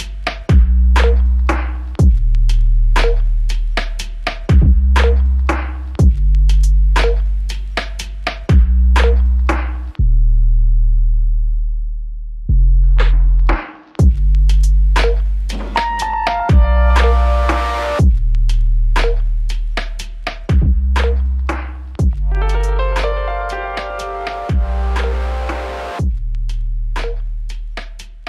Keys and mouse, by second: 0.5 alt+click, 3.7-4.5 s, 7.1 alt+click, 9.2 double click, 13.1 double click, 17.3 alt+click, 21.1 alt+click, 23.6 alt+click, 25.8 alt+click, 27.4 alt+click, 28.1 shift+click.